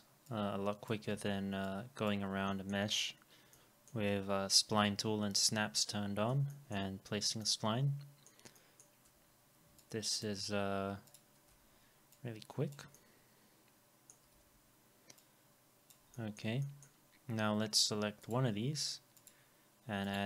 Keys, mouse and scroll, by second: 1.1 w, 2.5 alt+middle click, 3.5 alt+middle click, 6.5 alt+middle click, 8.6 alt+middle click, 9.8 shift+click, 11.5 e, 12.9 alt+middle click, 14.4 alt+middle click, 14.4 w, 16.1 alt+middle click, 16.6 middle click, 20.1 double click.